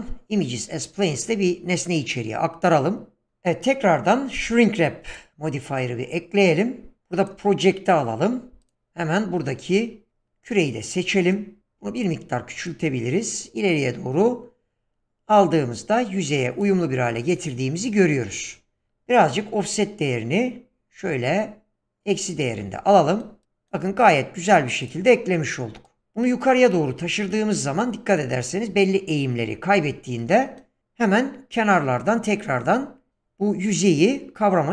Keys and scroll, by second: 11.6 s.